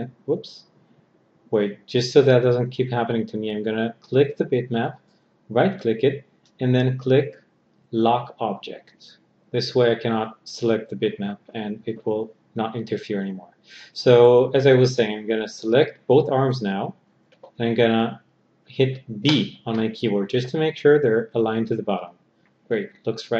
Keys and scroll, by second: 18.8 b.